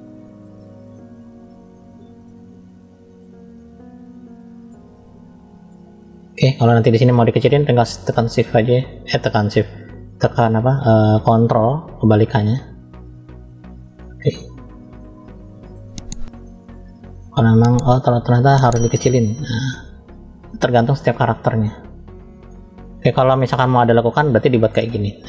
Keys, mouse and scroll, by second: 0.8 click, 2.8 click, 3.7 click, 6.4 scroll up 1, 6.6 middle click, 7.5 shift+click, 9.7 ctrl+click, 14.0 click, 15.5 ctrl+click, 17.2 middle click, 18.2 ctrl+click, 19.7-21.0 middle drag, 21.5 middle click, 23.6 click, 24.6-25.2 drag.